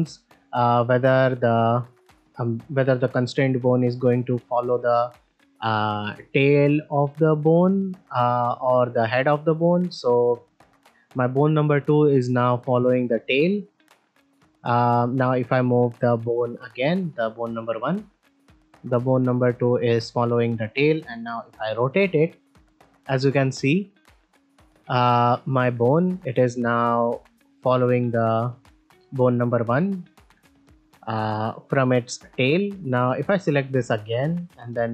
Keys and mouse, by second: 15.1 click, 16.1-16.5 middle drag, 17.0 middle drag, 17.8 click, 19.8-20.2 middle drag, 21.1 middle click, 21.8 r, 24.8-25.3 middle drag, 25.4 r, 27.7-28.0 middle drag, 27.7 r, 29.0 middle click, 30.2 r, 32.8 click, 34.7-34.9 drag.